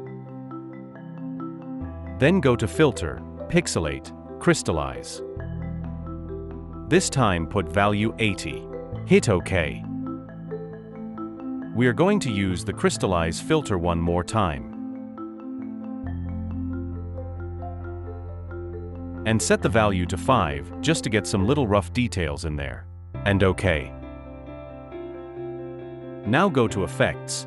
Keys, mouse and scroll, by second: 8.0-8.4 typing, 21.2 typing.